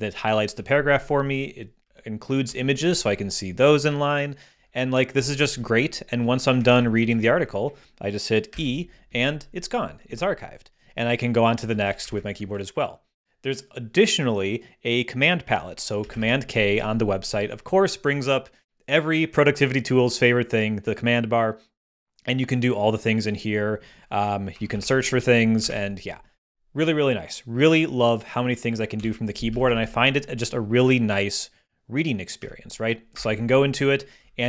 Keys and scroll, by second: 0.5 Down, 1.8 Down, 4.5 Down, 5.4 Down, 6.6 Up, 8.5 e, 11.5 Down, 12.0 Up, 16.1 super+k, 24.3-25.3 typing, 25.5 super+t, 25.6 super+a, 25.6 super+BackSpace, 28.9 ↺, 29.5 Down, 32.4 Up, 33.1 Return, 34.2 Down.